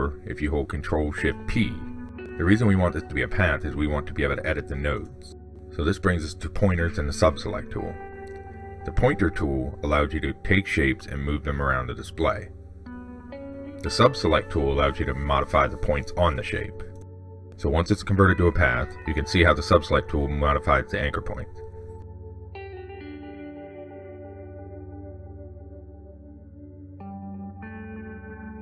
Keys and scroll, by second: 0.0 ctrl+shift+p, 14.7 ctrl+z, 19.0 ctrl+z.